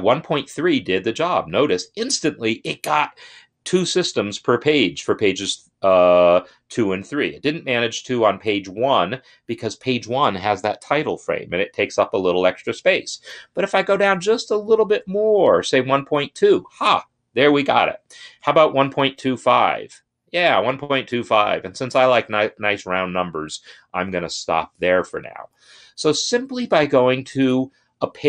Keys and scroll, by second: 13.4 Right, 14.6 Left, 15.6 2, 18.6 shift+Right, 19.3 5.